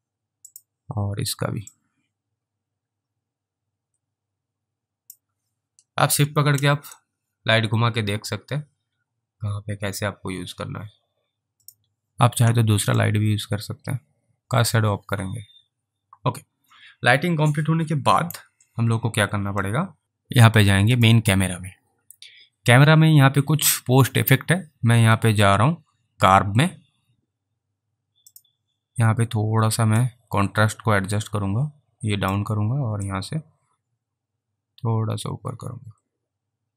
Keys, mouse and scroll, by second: 0.6 click, 2.0 click, 7.3 shift+right click, 11.6 alt+click, 11.7 click, 13.2 click, 14.4 click, 19.9 alt+click, 21.0 click, 28.4 click, 30.3 click, 33.4 click.